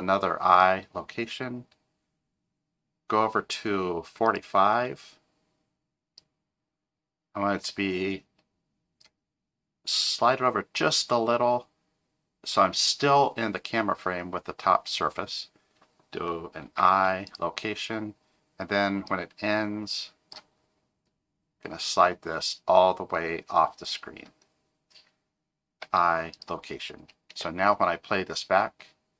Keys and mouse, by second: 4.3 click, 6.2-9.0 drag, 16.7 i, 19.1-20.3 drag, 21.9-23.8 drag, 25.8 i, 27.3 space.